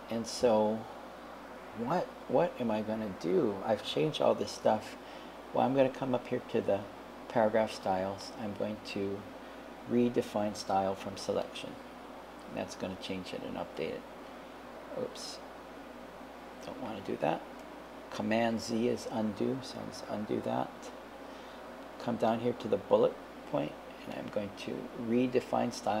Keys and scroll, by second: 18.7 super+z.